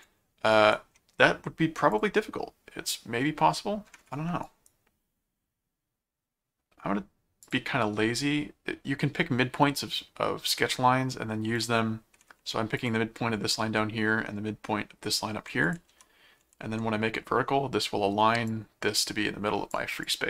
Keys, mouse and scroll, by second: 0.5 right click, 1.9 click, 4.5 right click, 7.5 click, 11.6 click, 12.8 click, 15.7 alt+click, 15.9 alt+c, 16.4 alt+v, 17.1 scroll up 2, 18.5 click, 20.1 click.